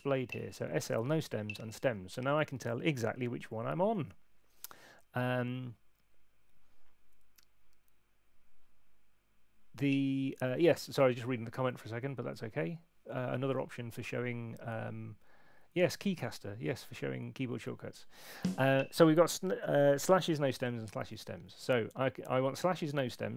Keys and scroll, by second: 9.8 Up, 18.3 Up, 18.6 Down, 21.0 Left.